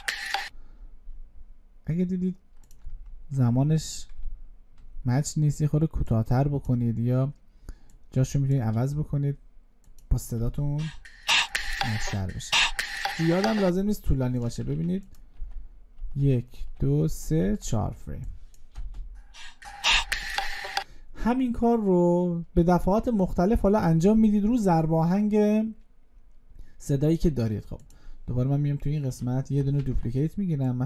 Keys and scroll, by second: 29.6 ctrl+d.